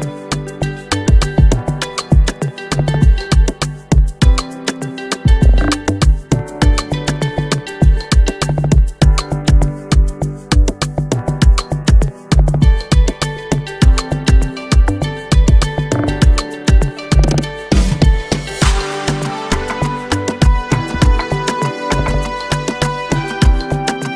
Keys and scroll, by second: 14.0 Right.